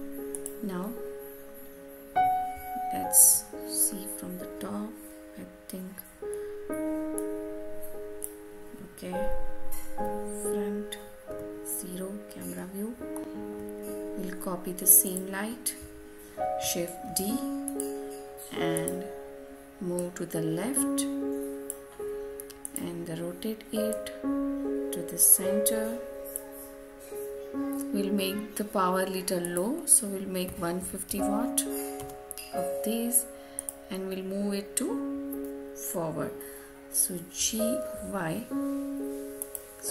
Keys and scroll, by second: 31.8 Return.